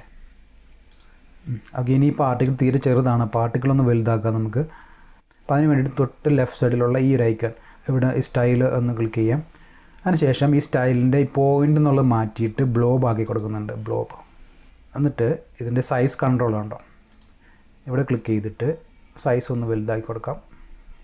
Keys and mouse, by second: 0.9 click, 6.9 click, 11.6 click, 13.2 click, 17.1 click, 18.2 click, 19.2-21.0 drag.